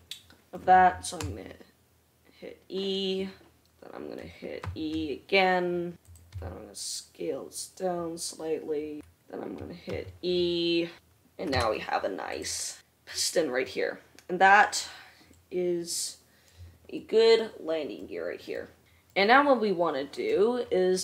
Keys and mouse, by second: 1.7 e, 5.2 e, 6.9 s, 10.1-12.6 middle drag, 10.4 e, 12.0 Tab, 12.6 click, 12.9-21.0 middle drag.